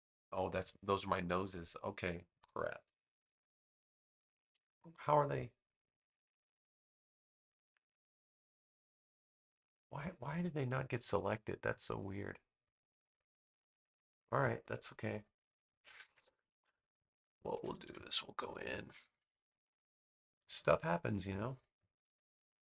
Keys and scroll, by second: 17.5 super+=, 19.2 space.